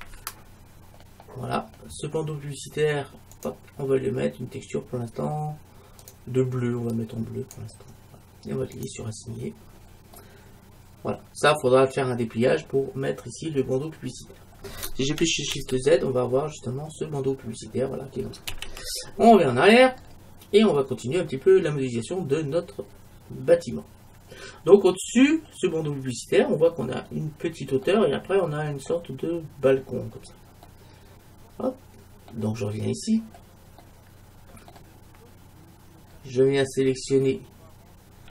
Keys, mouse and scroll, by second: 6.1-7.9 drag, 8.8-10.8 drag, 9.7 middle click, 10.2 right click, 10.8-12.0 middle drag, 14.5-15.6 scroll down 1, 15.6 shift+z, 18.7 shift+z, 20.1-20.7 scroll down 1, 20.7 middle click, 30.7-32.5 middle drag, 32.9-33.9 scroll up 1, 33.9-35.8 middle drag, 36.2-37.0 scroll down 1, 37.0-38.3 scroll down 1.